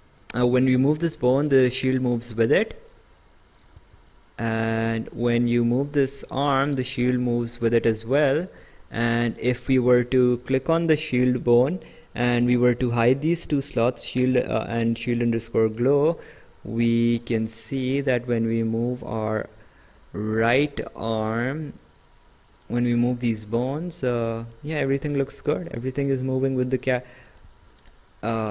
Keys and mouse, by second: 3.8 ctrl+z, 4.9 click, 8.4 ctrl+z, 10.5 click, 12.9 click, 14.8 click, 17.0 click, 18.1 click, 23.3 click, 26.5 click, 27.5 ctrl+z, 28.3 Escape.